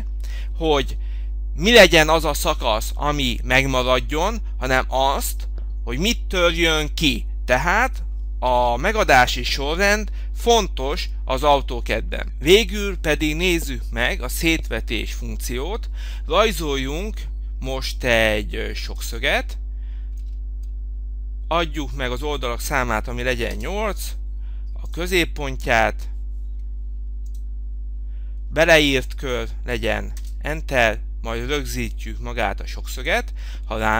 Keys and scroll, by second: 23.7 Return.